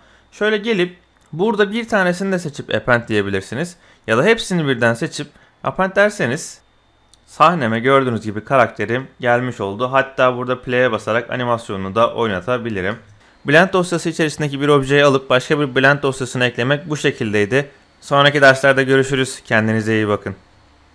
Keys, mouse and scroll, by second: 6.0 middle click, 7.2-9.4 middle drag, 10.6 click, 11.4 middle click, 12.0 z, 12.4 shift+middle click, 12.9 space.